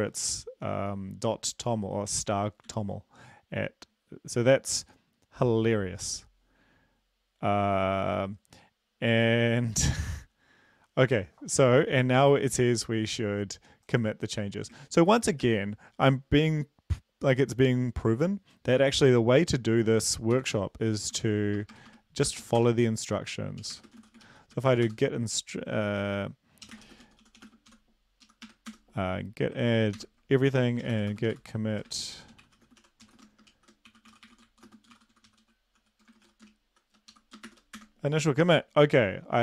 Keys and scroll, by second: 3.1 ctrl+s, 15.6 ctrl+`, 20.6 ctrl+l, 21.5-25.1 typing, 27.1-29.1 typing, 30.0 ctrl+l, 31.1-37.6 typing, 37.6 Left, 38.1 Return.